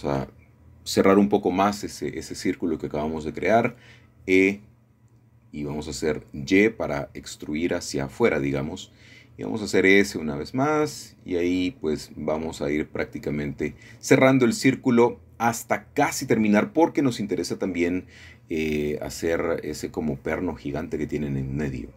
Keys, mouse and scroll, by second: 0.0 click, 2.9-4.3 shift+drag, 6.8 y, 8.9 click, 9.5 s, 11.6-12.8 drag, 12.9 e, 13.1 s, 15.3 click, 17.4 click, 18.1 e, 18.5 s, 21.5 click.